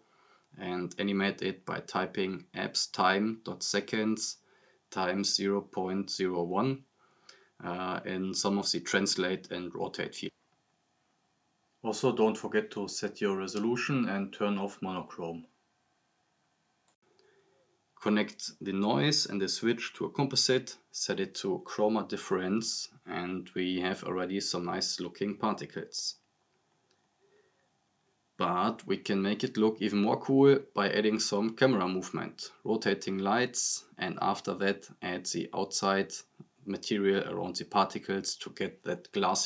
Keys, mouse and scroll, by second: 0.4-2.7 typing, 3.7 click, 4.2-7.0 typing, 7.8-8.3 drag, 9.2 drag, 13.2 right click, 14.5 click, 17.5-18.4 drag, 33.0-34.2 drag, 35.8 scroll down 1, 36.4 click.